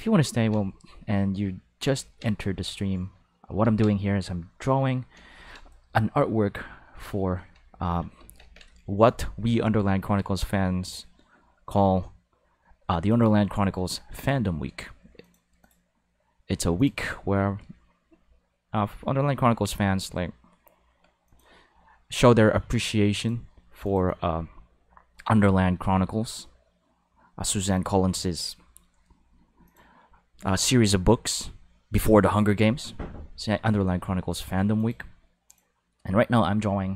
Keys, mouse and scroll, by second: 0.6-1.6 drag, 2.3-3.3 drag, 4.1 click, 5.3 ctrl+z, 5.8-7.0 drag, 8.3 ctrl+s, 13.1 click, 15.2 click, 15.6 click, 16.7 click, 21.2 click, 29.6 click, 35.4 click.